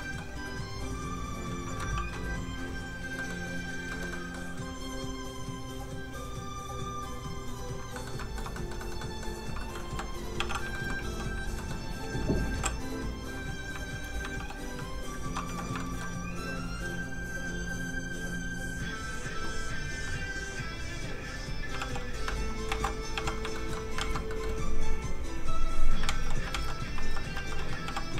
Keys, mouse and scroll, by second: 0.0 middle click, 1.9 ctrl+d, 2.6 click, 2.7 click, 3.1 middle click, 3.9 shift+middle click, 4.1 middle click, 5.1 click, 7.9 middle click, 8.1 shift+middle click, 8.5 middle click, 8.6 middle click, 8.8 shift+middle click, 9.0 shift+middle click, 9.9 shift+k, 10.3 f, 10.5 click, 10.7 shift+middle click, 10.9 scroll up 1, 11.0 f, 11.2 click, 11.5 middle click, 12.5 i, 12.9 click, 14.3 shift+f, 15.4 z, 15.8 shift+middle click, 16.0-16.4 scroll up 1, 16.6 z, 17.5 click, 19.1-19.6 scroll down 1, 19.7 click, 21.8 shift+f, 21.9 click, 22.7 alt+m, 23.1 f, 23.3 click, 23.5 shift+middle click, 23.9 alt+shift+z, 24.6 click, 26.0 alt+shift+z, 26.4 alt+shift+z, 26.9 alt+z, 27.0 alt+z, 27.8 z, 27.9 f, 28.0 click.